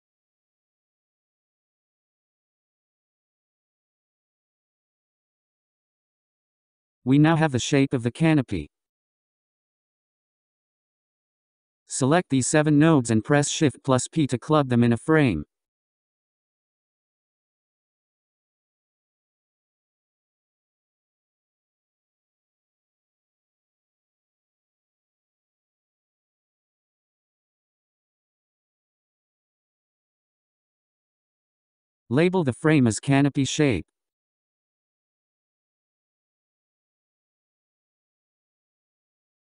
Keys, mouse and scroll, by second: 8.6-11.7 middle drag, 11.7-13.3 scroll down 11, 13.3-17.0 drag, 18.2 click, 20.8 scroll up 5, 21.4 click, 22.5-25.9 drag, 26.6-27.6 scroll down 2, 27.6-30.4 drag, 30.4 shift+p, 32.6 n, 34.1 click, 35.1-38.3 drag.